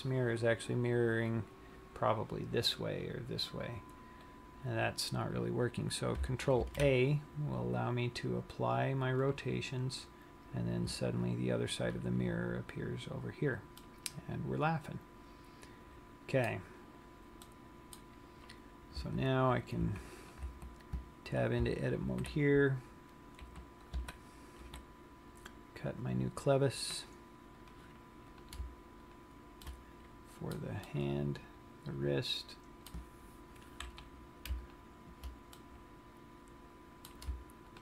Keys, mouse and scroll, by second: 6.9 ctrl+a, 11.3-12.3 scroll up 8, 12.3-14.1 scroll down 1, 14.1 middle click, 17.8 middle click, 18.5-19.0 scroll up 5, 19.1 Tab, 20.0 Tab, 20.4 click, 20.7 Tab, 22.2 ctrl+r, 25.4-25.8 scroll up 3, 27.9 click, 28.7 click, 29.4 shift+click, 29.9 shift+middle click, 31.2 middle click, 35.0 shift+click, 35.7 middle click.